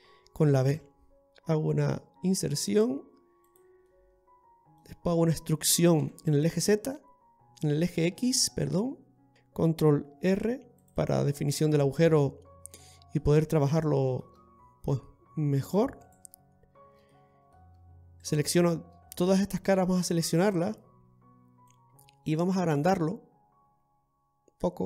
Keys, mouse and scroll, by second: 5.0-6.1 scroll down 1, 6.1-7.0 scroll down 1, 6.1 e, 9.3 shift+middle click, 9.3-9.8 scroll up 3, 10.3 ctrl+r, 12.8 middle click, 13.9 shift+middle click, 14.5-14.9 scroll up 1, 14.9 scroll down 1, 15.9 scroll down 1, 16.1 right click, 17.2 middle click, 18.3 shift+right click, 19.7 middle click, 21.7 click.